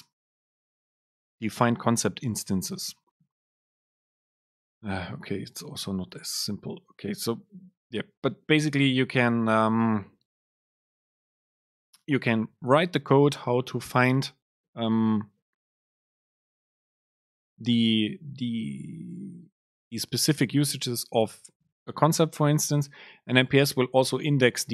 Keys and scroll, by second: 0.3 ctrl+alt+shift+super+F7.